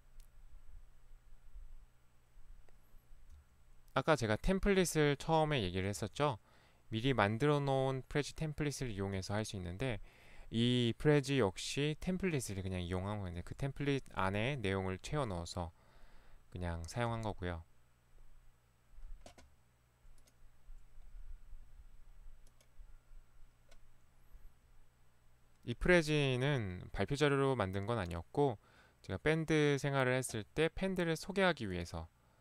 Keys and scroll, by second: 3.4 Right, 6.0 Right, 9.2 Right, 13.5 Right, 15.1 Right, 17.1 Right.